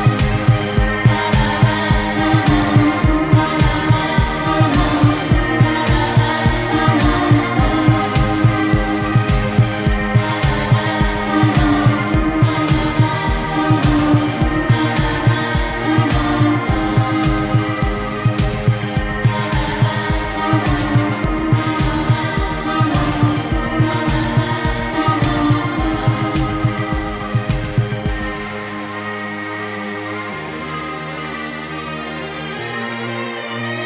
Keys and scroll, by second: 11.8 ctrl+z, 12.7 ctrl+z, 14.3 ctrl+z, 14.5 ctrl+z, 14.9 ctrl+z, 15.3 ctrl+z, 18.1 ctrl+z, 20.7 ctrl+z, 21.3 ctrl+z, 23.1 ctrl+z, 24.2 ctrl+z, 25.9 ctrl+z, 26.3 ctrl+z, 26.8 ctrl+z, 27.4 ctrl+z, 28.2 space, 29.5 space, 30.6 space, 33.1 ctrl+z.